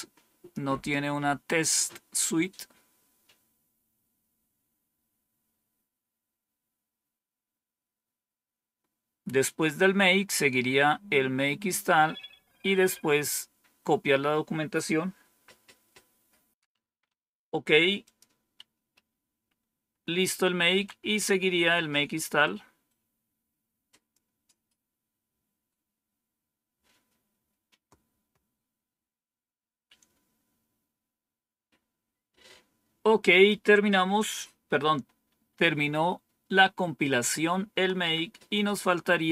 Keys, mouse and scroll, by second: 5.1 scroll down 1, 17.9 click, 18.6 Up, 20.6-39.3 Down, 22.3-24.9 drag, 33.4 click, 34.0 Page_Up, 37.9 Page_Down.